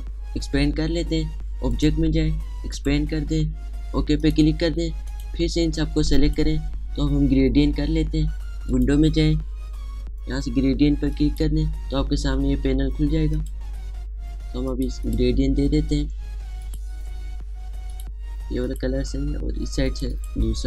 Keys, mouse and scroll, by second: 0.3 shift+click, 2.5-9.5 shift+drag, 11.9 click, 14.1 click.